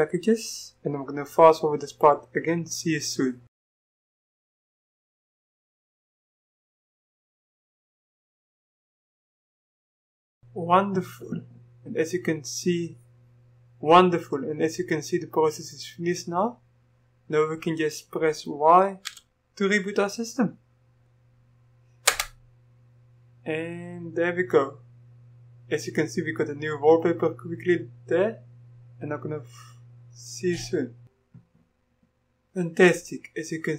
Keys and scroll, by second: 19.1 typing, 22.1 Return.